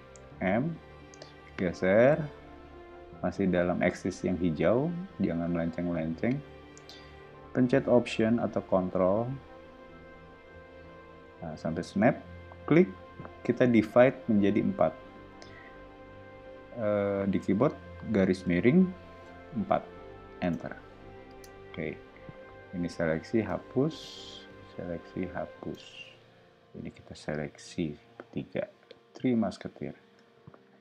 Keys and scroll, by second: 0.0 m, 18.4 /, 19.6 4, 20.4 Return, 21.3 space, 23.4 BackSpace, 25.7 BackSpace, 28.5 o.